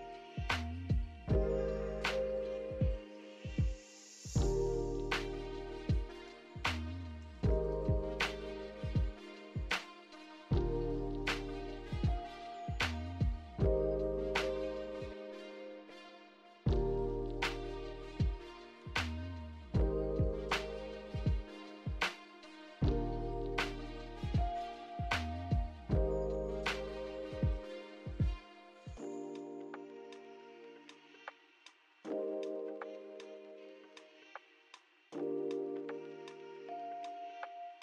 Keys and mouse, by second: 0.8 Tab, 1.3 a, 2.0-3.3 drag, 6.8 shift+click, 7.2 shift+click, 7.8 shift+click, 8.1 shift+click, 8.6 shift+click, 9.6 shift+click, 11.1-12.0 drag, 12.2 click, 13.0-14.1 drag, 15.7 click, 17.8 click, 18.5 click, 18.8-19.9 drag, 21.2 Tab, 21.6 shift+middle click, 24.8 Tab, 24.8 KP_1, 24.8 a, 25.2 l, 25.7-26.6 drag, 27.1 alt+z, 30.2 shift+middle click, 30.2 shift+click, 30.7 alt+z, 32.2 shift+click, 33.3 shift+click, 34.3 middle click, 34.6 right click, 35.9 right click, 36.4 click, 36.6 click.